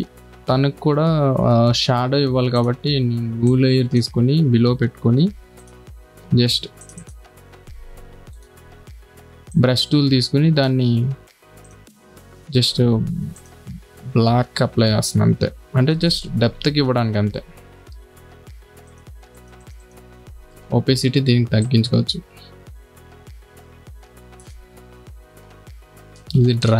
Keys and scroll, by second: 5.6 b, 13.1 d, 16.5 [, 18.4 4.